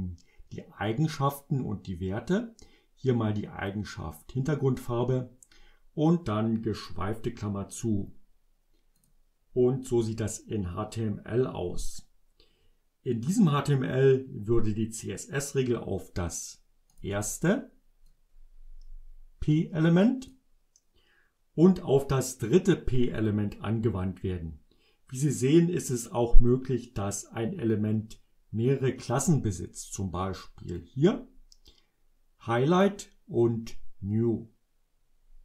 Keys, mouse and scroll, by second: 9.1 click, 17.0 click, 18.2-20.6 drag, 30.9-33.1 drag.